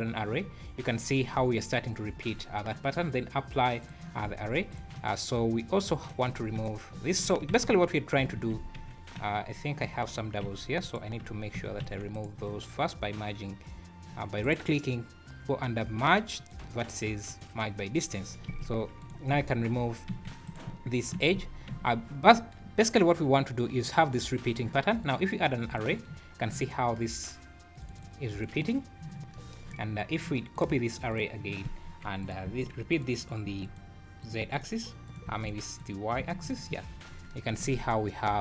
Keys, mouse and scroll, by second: 0.4 scroll down 5, 2.3 scroll up 2, 3.8 click, 4.3 Tab, 4.7 click, 6.0 click, 6.6 click, 7.5 ctrl+x, 8.4 ctrl+x, 9.2 q, 10.4 g, 11.5 a, 11.8 1, 12.1 right click, 14.4 right click, 18.5 2, 19.0 click, 20.1 g, 21.1 ctrl+x, 21.7 Tab, 22.9 scroll up 1, 25.0 click, 26.0 scroll down 6, 27.8 click, 27.9 click, 28.3 click, 30.5 click, 31.1 click, 32.2 click, 33.2 click, 34.2 click, 35.0 click, 35.7 click, 36.9 scroll down 3, 37.6 alt+a, 37.8-38.2 scroll up 3.